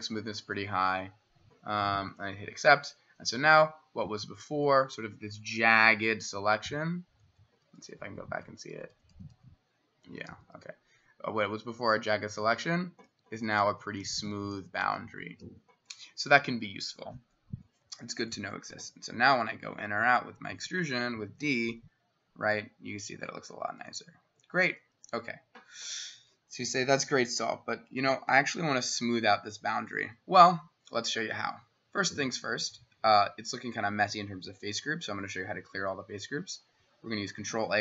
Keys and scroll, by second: 6.6 ctrl+z, 7.5 ctrl+z, 7.7 ctrl+z, 7.9 ctrl+z, 10.3 ctrl+y, 12.3 ctrl+y, 13.1 ctrl+y, 13.5 ctrl+y, 18.7 d, 24.4 Escape, 37.4 ctrl+a.